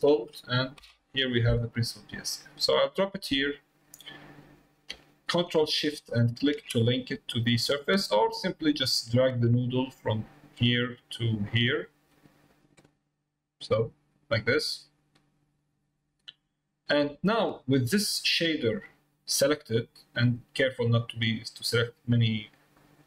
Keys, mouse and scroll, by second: 6.2 ctrl+shift+click, 8.8 click, 10.3-11.4 drag, 14.0 click, 15.1 click, 16.5 middle click, 18.0 middle click, 18.7 click, 22.6 middle click.